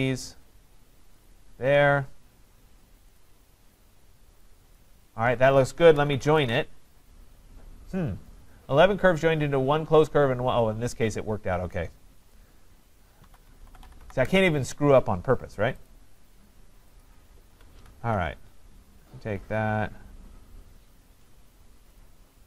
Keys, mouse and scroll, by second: 1.3 click, 1.8-2.6 scroll, 3.2 shift+click, 3.8 shift+click, 4.8 shift+click, 5.7-7.7 typing, 7.2-8.2 scroll down 4, 11.0 scroll down 5, 11.8-12.3 scroll up 5, 12.3 scroll, 13.0-14.5 typing, 15.9 ctrl+click, 16.2 typing, 17.0 ctrl+click, 22.0 ctrl+click.